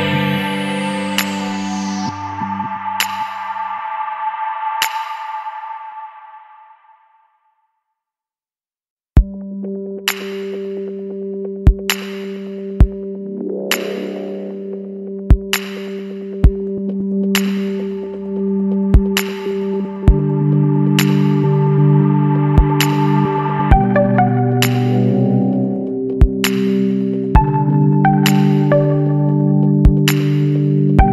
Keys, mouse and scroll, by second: 1.5 click, 2.4 KP_0, 2.7 KP_Decimal, 2.9 KP_5, 4.2 click, 5.7-6.5 scroll down 2, 6.7 scroll down 1, 7.5 click, 8.0 Right, 8.3 Up, 8.8 Right, 14.7 click, 17.2 click, 19.7 click, 21.1 click, 21.9 click, 22.9 KP_1, 23.3 KP_Decimal, 23.5 KP_5, 27.1 click, 28.1 click.